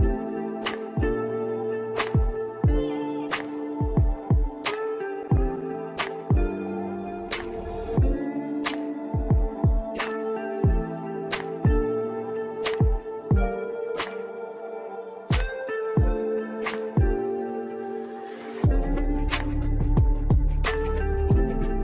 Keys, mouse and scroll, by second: 0.2 shift+click, 4.4 ctrl+z, 5.1 ctrl+click, 5.4 ctrl+click, 5.8 ctrl+z, 6.2 ctrl+click, 6.8 g, 7.8 ctrl+z, 8.0 scroll up 4, 8.3 shift+middle click, 8.8 ctrl+click, 9.3 ctrl+click, 9.6-10.0 scroll down 5, 10.0 click, 11.1 click, 11.6 shift+click, 12.3 shift+click, 12.9-13.4 scroll down 3, 13.4 shift+click, 14.0 shift+click, 14.6 g, 16.2 click, 16.3-18.7 scroll down 6, 18.7-19.0 scroll down 1, 19.0 Tab, 19.5-19.9 scroll down 1, 19.9-20.7 middle drag, 20.7-21.1 scroll down 2, 21.1-21.8 middle drag.